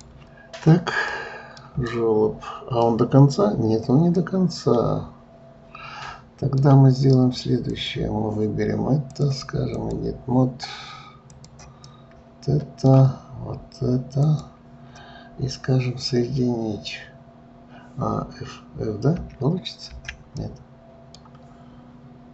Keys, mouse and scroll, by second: 1.1-7.2 middle drag, 7.7 click, 9.1-11.4 drag, 11.8-14.2 middle drag, 14.2 shift+click, 19.2 f, 19.9 f, 20.4-22.3 middle drag.